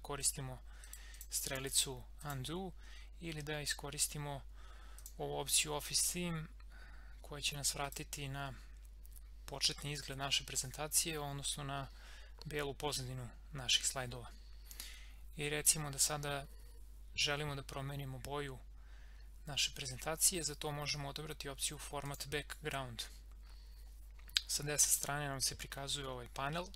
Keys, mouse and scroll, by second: 0.2 click, 5.0 click, 7.2-7.8 scroll up 1, 7.8 click, 22.0 click.